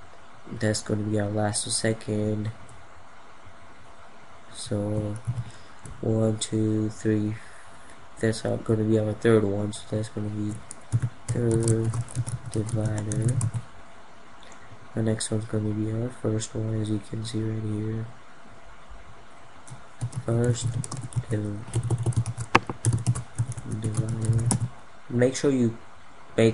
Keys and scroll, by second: 4.8 ctrl+0.